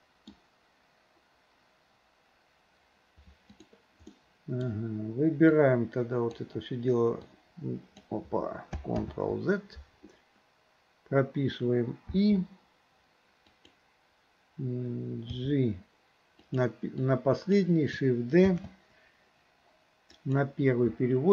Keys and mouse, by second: 3.6 click, 4.2-4.7 middle drag, 5.6-6.4 drag, 7.3-8.1 drag, 9.1 ctrl+z, 12.1 i, 13.5 click, 15.3 g, 17.0-17.6 drag, 18.6 shift+d.